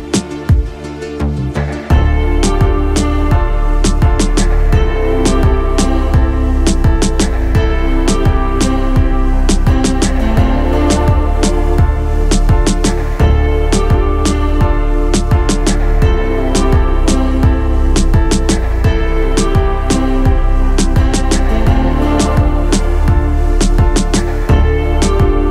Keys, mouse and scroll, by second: 1.4-3.8 middle drag, 4.5 shift+middle click, 5.5 middle click, 6.6 shift+middle click, 9.1 middle click, 10.9-12.9 middle drag, 13.4 shift+middle click, 14.1-15.2 middle drag, 17.3-19.5 middle drag, 20.6-25.5 middle drag.